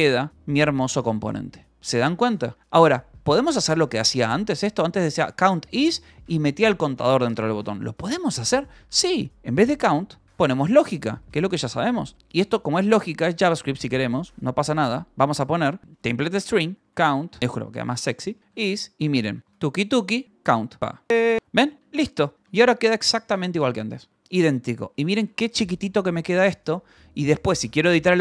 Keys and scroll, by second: 0.0-1.3 typing, 3.1 e, 4.1 u, 4.6 j, 5.5 shift+v, 7.5 Escape, 7.8-12.5 typing, 12.1 Escape, 15.8-24.8 typing, 23.0 Escape, 25.8-28.2 typing.